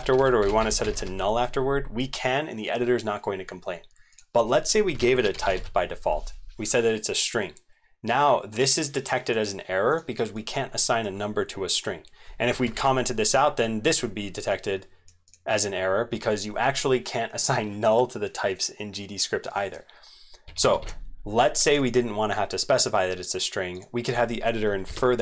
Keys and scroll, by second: 12.7 ctrl+/, 20.8 ctrl+/.